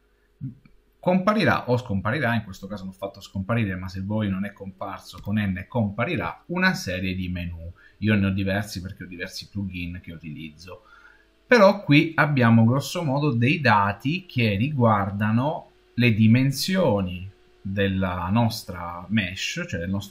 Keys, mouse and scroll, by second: 5.0 n.